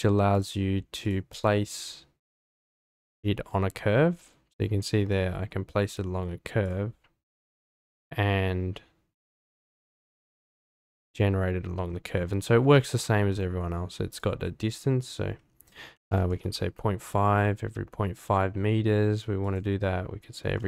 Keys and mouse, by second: 0.3-1.6 drag, 7.0-7.7 drag, 13.4-16.9 drag, 19.4-20.6 drag.